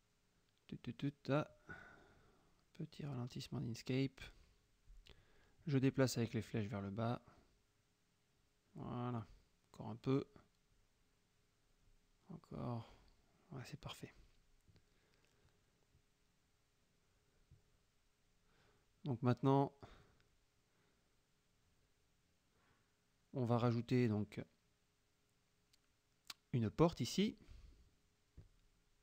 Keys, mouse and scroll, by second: 5.1 Down, 6.9 click, 7.7 Down, 10.0 Down, 11.9 Down, 14.2 click, 15.9 click, 16.3-19.0 middle drag, 19.0 click, 19.3 middle click, 19.6 click, 23.3 click, 24.3 click, 25.8 click.